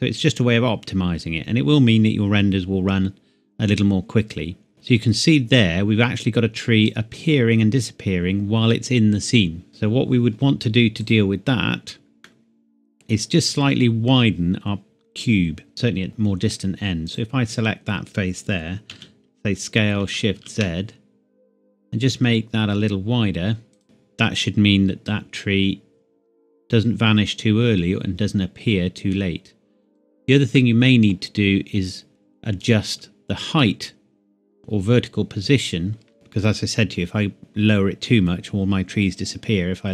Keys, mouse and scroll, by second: 9.7 click, 12.3 middle click, 13.1 scroll down 1, 13.6 scroll up 1, 13.8 scroll down 1, 15.7 Tab, 16.1 middle click, 17.1 click, 18.9 s, 20.4 shift+z, 23.7 click, 23.8 Tab, 25.1 click, 25.4 click, 30.6 middle click, 31.2 scroll down 1, 32.6 click, 33.6 middle click, 36.1 g.